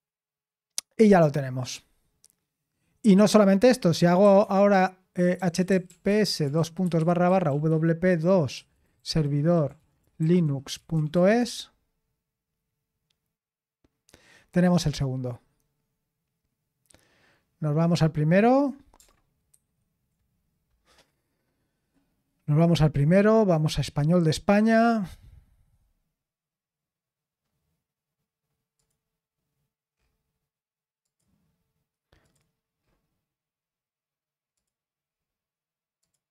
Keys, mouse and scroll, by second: 4.2 ctrl+t, 5.1-11.6 typing, 19.5 ctrl+1, 21.8 click, 28.7 click, 31.0 click, 32.2 click, 34.5 click, 36.0 click.